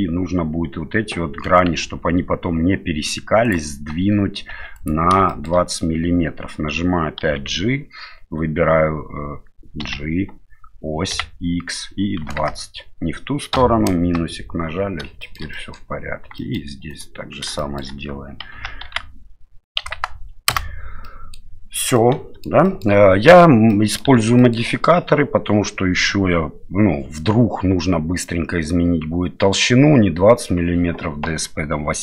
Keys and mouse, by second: 1.8 F2, 4.5 2, 4.8 right click, 5.3 shift+middle click, 7.2 d, 9.8 g, 15.2 shift+middle click, 15.5 middle click, 16.4 middle click, 16.9 right click, 17.6 shift+middle click, 18.5 g, 21.0 middle click, 21.9 middle click, 22.6 shift+middle click, 23.7 middle click, 24.1 Tab, 24.4 middle click.